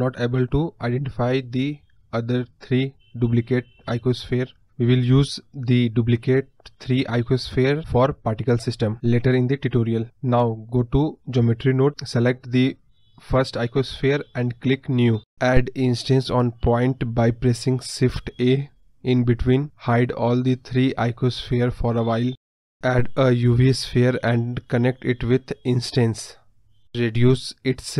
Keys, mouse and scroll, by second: 0.2 click, 0.4 click, 1.1 click, 8.9 click, 9.6 click, 9.8 scroll down 1, 9.9-14.1 middle drag, 14.1 scroll up 1, 14.3-21.1 middle drag, 21.1-27.9 drag.